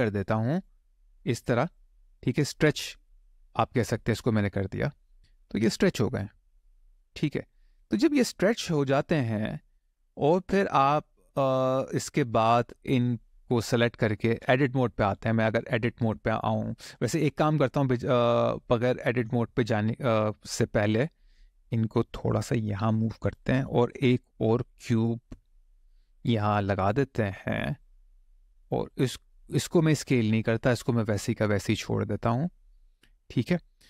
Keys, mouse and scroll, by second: 1.5 click, 2.9 click, 4.0 click, 5.8 click, 7.0 middle click, 8.8 scroll down 1, 9.3 middle click, 13.0 click, 13.7 shift+click, 16.7 click, 17.2-18.2 scroll down 2, 18.4 shift+middle click, 19.1 middle click, 20.6 click, 21.2 shift+click, 22.2 click, 23.3 click, 24.0 shift+a, 27.6 click, 28.7 click, 29.0 middle click, 30.0 shift+middle click, 30.6-31.1 scroll up 1, 31.4 middle click.